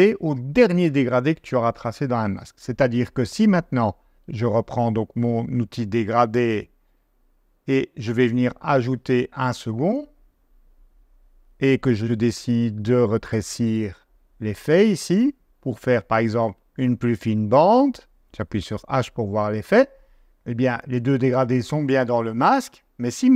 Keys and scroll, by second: 18.3 h.